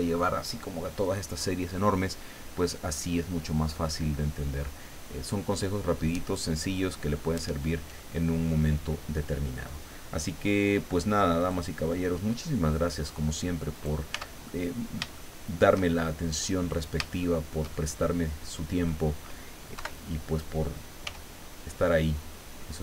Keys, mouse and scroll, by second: 11.4 click, 13.0 click, 13.7 right click, 14.1 Tab, 14.5-15.8 middle drag, 16.0 shift+middle click, 17.2 shift+middle click, 18.2 middle click, 19.8 KP_7, 21.1 g.